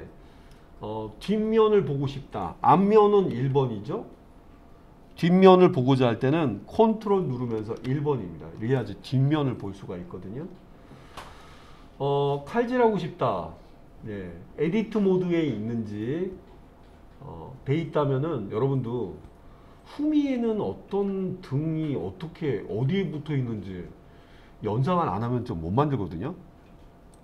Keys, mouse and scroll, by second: 3.3 KP_1, 7.8 ctrl+KP_1, 10.4-11.4 scroll up 3, 11.4-14.6 scroll up 2.